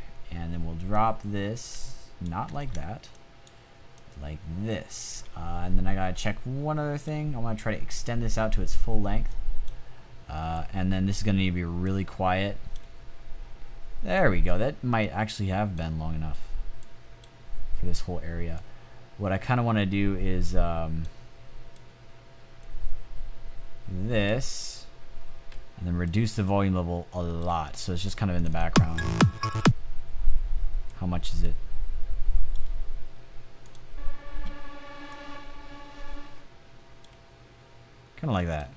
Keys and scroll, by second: 2.5 super+z.